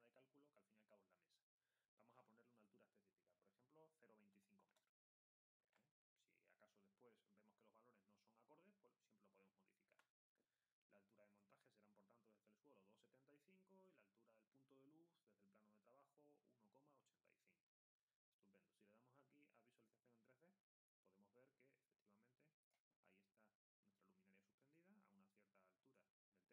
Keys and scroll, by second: 5.3-6.2 typing.